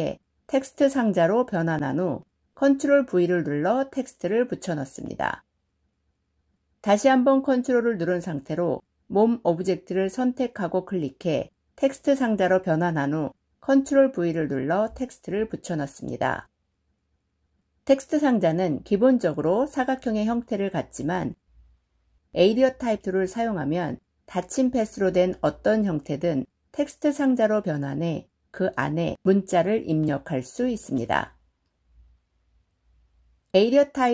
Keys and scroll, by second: 2.6 ctrl+v, 13.6 ctrl+v.